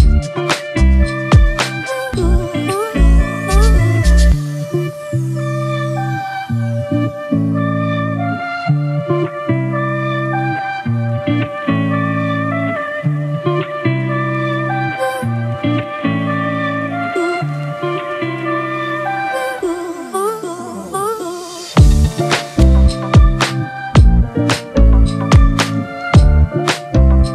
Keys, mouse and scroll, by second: 0.0-0.3 typing, 2.5 ctrl+-, 2.6 ctrl+-, 3.1 ctrl+-, 7.0 right click, 9.6-10.4 alt+scroll up 1, 23.8 double click.